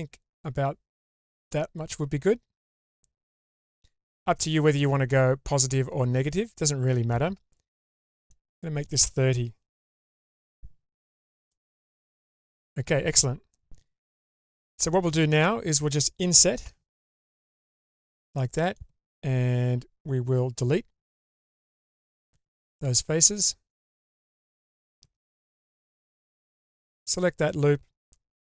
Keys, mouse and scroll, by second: 8.2-10.6 drag, 11.5-13.8 middle drag, 14.4 scroll up 1, 14.9 middle click, 15.6-16.6 scroll up 1, 16.6 i, 18.4 middle click, 22.0 Delete, 25.0 2, 26.6 alt+click.